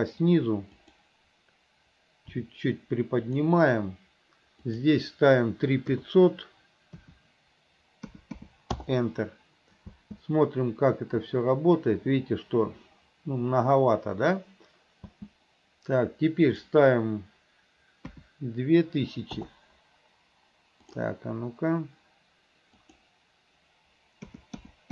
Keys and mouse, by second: 2.4 r, 4.9-8.9 drag, 8.4 KP_0, 10.0 space, 15.2 space, 16.7-19.5 drag, 21.1-24.9 drag, 24.7 KP_0.